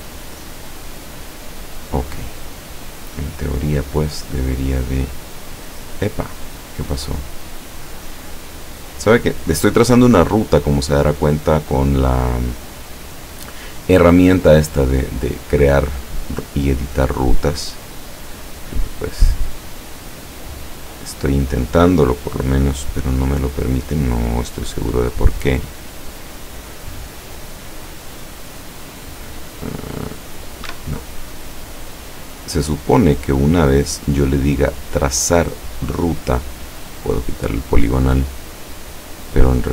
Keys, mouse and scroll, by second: 1.9 click, 4.8 click, 6.8 click, 18.6 click, 19.8 click, 20.9 click, 23.7 click, 27.2 click, 28.2 click, 29.6 right click, 30.8 Escape, 34.2 click, 36.4 click, 38.9-39.7 drag.